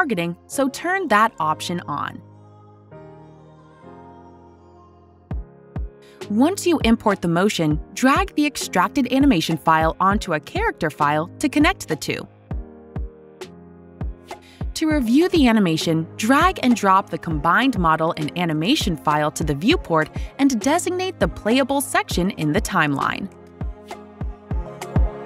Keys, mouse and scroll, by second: 11.0-14.5 drag, 15.7 click, 17.4 alt+click, 17.7 alt+middle click, 17.8-18.5 alt+scroll, 19.7 alt+right click, 20.3-21.7 scroll, 22.2 middle click, 22.3 scroll, 23.7 click.